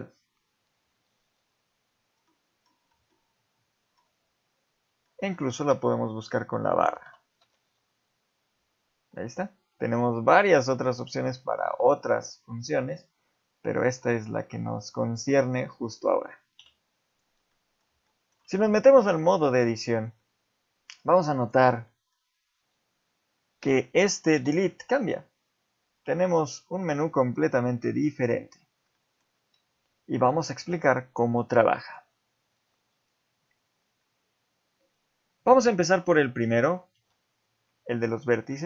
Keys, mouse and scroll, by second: 0.1 scroll up 2, 2.3 middle click, 3.1 middle click, 4.2-4.6 scroll up 5, 5.1 shift+middle click, 5.5 space, 17.1 click, 17.5 middle click, 18.1 shift+middle click, 19.1 Tab, 19.9-20.5 scroll down 2, 21.4 click, 21.9 middle click, 22.4 scroll up 1, 24.4 x, 28.9 middle click, 30.2 middle click, 31.8 click, 37.0 x.